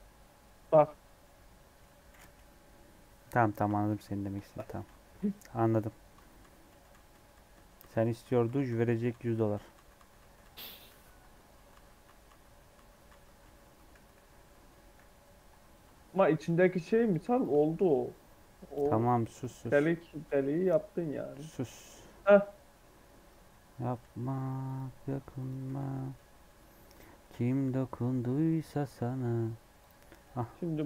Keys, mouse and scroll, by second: 2.4 KP_3, 3.5 1, 3.8 alt+z, 4.8 ctrl+z, 6.1 ctrl+z, 6.3 ctrl+z, 6.6 ctrl+z, 6.8 ctrl+z, 7.0 ctrl+z, 7.2 ctrl+z, 7.4-8.1 ctrl+z, 8.4 ctrl+z, 8.6 ctrl+z, 8.8 ctrl+z, 9.0 ctrl+z, 10.3 ctrl+z, 11.6 ctrl+z, 12.0 ctrl+z, 12.2 ctrl+z, 12.6 ctrl+z, 13.0 ctrl+z, 13.3 ctrl+z, 13.6-14.3 ctrl+z, 14.9 ctrl+z, 15.8-16.7 scroll down 1, 16.7 1, 17.0 click, 17.5-19.2 shift+middle drag, 19.2 click, 23.8 g, 25.0 Tab, 25.3 click, 25.6 alt+z, 25.8 scroll down 1, 25.9 middle click, 26.1 Tab, 26.4 scroll up 1, 26.4 middle click, 26.8 3, 26.9 click, 27.2 scroll up 2, 27.5-28.5 middle drag, 28.5 scroll up 1, 28.9 middle click, 29.2-29.6 scroll down 3, 29.8 click, 30.0 middle click, 30.3 e.